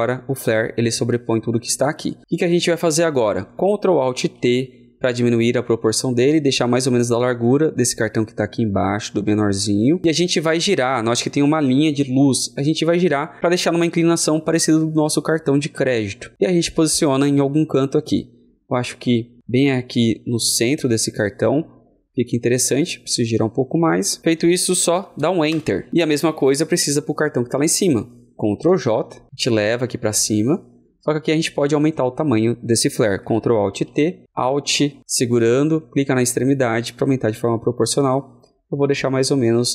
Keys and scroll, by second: 3.9 ctrl+l, 4.2 ctrl+alt+t, 28.5 ctrl+alt+t, 28.7 ctrl+j, 33.2 ctrl+j, 33.6 ctrl+alt+t, 35.0 ctrl+alt+t.